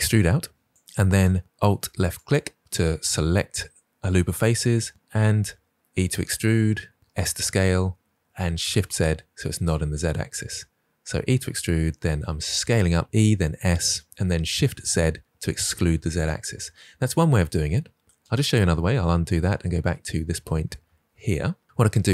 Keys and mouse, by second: 2.1 alt+click, 6.0 e, 7.0 s, 8.6 shift+z, 16.0 click, 18.3 ctrl+z, 18.7 ctrl+z, 19.1 ctrl+z, 19.9 ctrl+z, 20.8 ctrl+z.